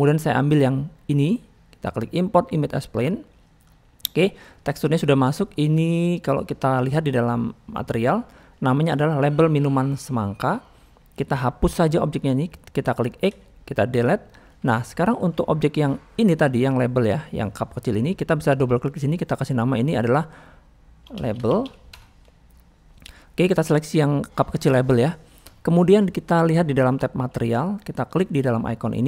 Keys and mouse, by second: 5.7-6.2 drag, 7.6 click, 10.7 middle click, 11.8 click, 16.2 middle click, 18.9-21.9 drag, 25.5 shift+middle click, 28.9-29.0 drag.